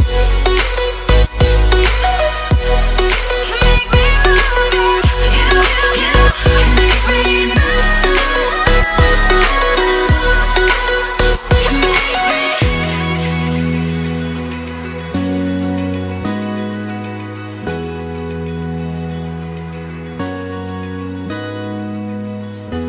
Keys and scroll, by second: 1.7 space, 2.2 alt+super+space, 2.3 alt+super+space, 2.3-3.9 alt+super+space, 4.5-5.2 space, 7.0 space, 20.9 a, 21.7 v, 22.3 space, 22.8 super+space, 22.8 super+space.